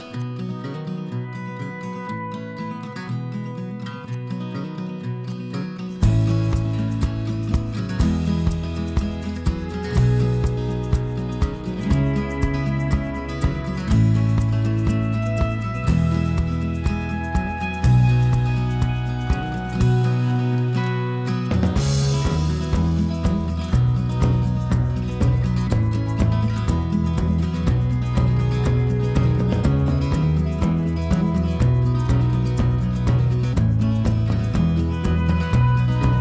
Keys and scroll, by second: 24.3 2, 28.0 2.